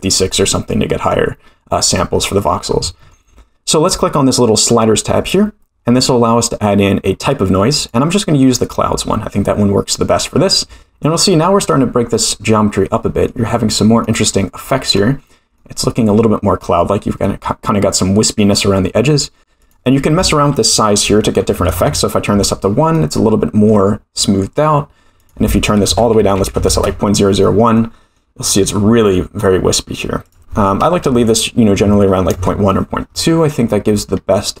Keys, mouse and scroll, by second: 5.1 click, 7.8-8.9 drag, 9.8-10.8 scroll up 1, 10.9-11.3 scroll down 1, 11.3-13.2 middle drag, 13.7 scroll up 1, 14.0-14.9 middle drag, 15.6-16.6 middle drag, 17.3 middle drag, 19.6-22.5 drag, 22.9-23.7 middle drag, 24.2 middle drag, 25.2-27.3 drag, 26.4 0, 27.7-28.1 middle drag, 28.5-29.1 middle drag, 30.2-33.0 drag, 33.6-34.0 middle drag, 34.1-34.6 scroll down 2.